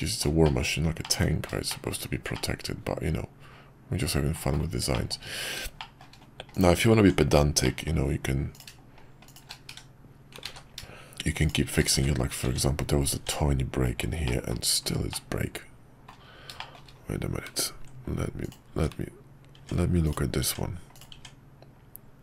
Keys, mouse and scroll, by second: 0.4 shift+middle click, 1.0 middle click, 1.7 shift+middle click, 2.3-4.3 middle drag, 4.9 shift+middle click, 5.8 shift+middle drag, 6.6-7.0 drag, 7.0 Tab, 7.6 middle click, 8.5 click, 9.2 click, 9.8 1, 10.5 ctrl+z, 12.0 1, 12.4 Tab, 14.2 middle click, 15.1-16.1 middle drag, 16.6 shift+middle drag, 18.4 click, 18.7 Tab, 20.0 click.